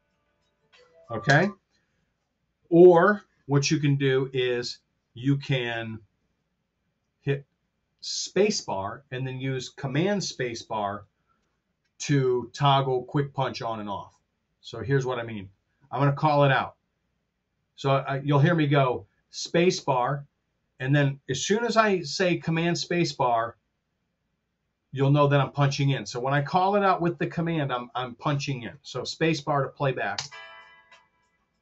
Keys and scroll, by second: 1.2 space, 2.9 super+z, 30.0 space.